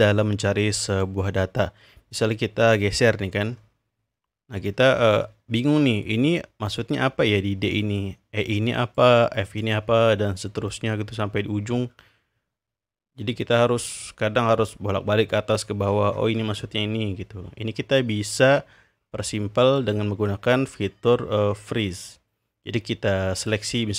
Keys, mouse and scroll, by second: 0.8 click, 2.9-4.1 scroll down 2, 4.1-5.7 scroll down 1, 6.6 click, 8.8 click, 9.4 click, 10.6-13.8 drag, 14.2-15.6 scroll up 2, 15.6-16.1 scroll down 3, 16.1 scroll up 1, 16.3-16.6 scroll down 2, 16.6-17.6 scroll up 2, 19.7 click, 23.4 drag.